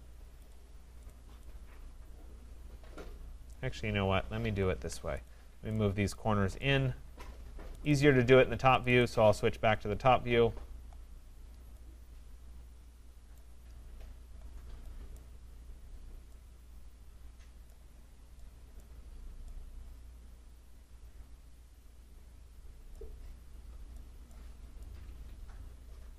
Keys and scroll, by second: 4.4 ctrl+z.